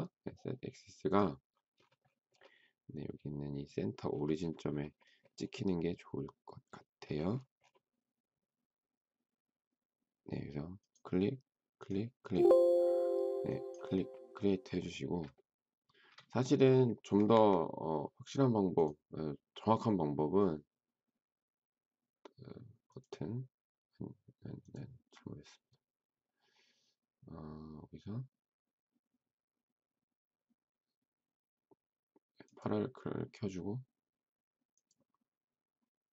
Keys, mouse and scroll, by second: 15.3 shift+middle click, 17.3 Escape.